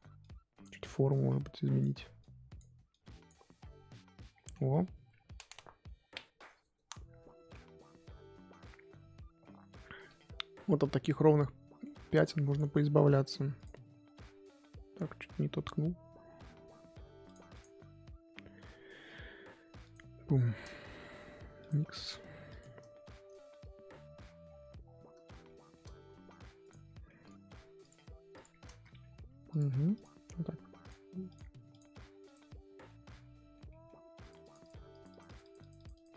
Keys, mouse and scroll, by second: 3.5-4.3 scroll down 6, 4.3-9.8 middle drag, 9.8-11.4 scroll up 4, 11.4-12.5 middle drag, 12.5-22.9 drag, 22.9-26.7 shift+middle drag, 26.7 click, 27.0 middle click, 27.5 f, 28.3 click, 28.7 ctrl+z, 29.1 f, 29.9-32.8 drag, 32.8-34.2 middle drag, 34.2-36.1 drag.